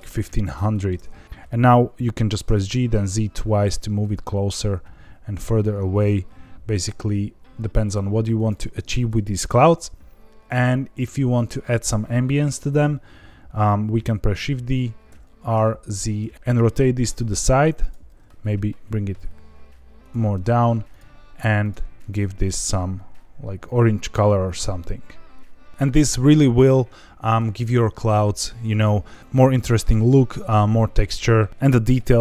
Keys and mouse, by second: 1.2 g, 1.2 Escape, 1.2 z, 2.4 g, 2.6 z, 2.9 z, 8.3 click, 14.3 shift+d, 15.0 r, 15.5 z, 16.3 Escape, 17.8 click, 18.0 g, 18.1 z, 19.9 click, 20.8 click, 21.6 click.